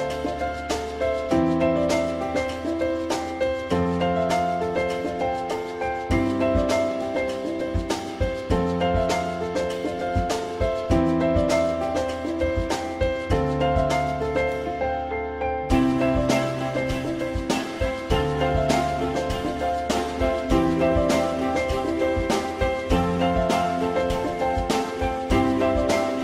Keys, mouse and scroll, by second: 1.2 click, 2.4 alt+middle click, 5.1 alt+middle click, 9.9 alt+middle click, 18.2 alt+middle click, 23.6 ctrl+click, 25.1 Delete.